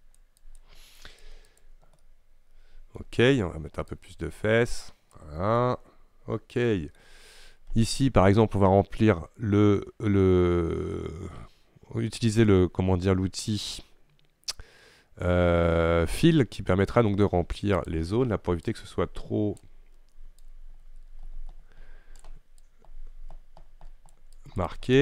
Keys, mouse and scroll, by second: 2.1-4.0 middle drag, 4.0-5.7 drag, 5.7-17.9 middle drag, 17.9 click, 18.7-19.9 drag, 19.9-20.5 scroll up 2, 20.5-25.0 drag.